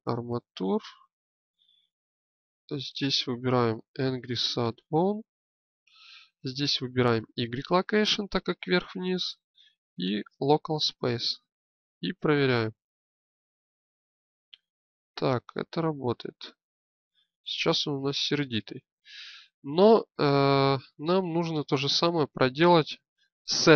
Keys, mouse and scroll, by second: 1.9-4.0 drag, 5.9-8.6 drag, 9.2-14.0 drag.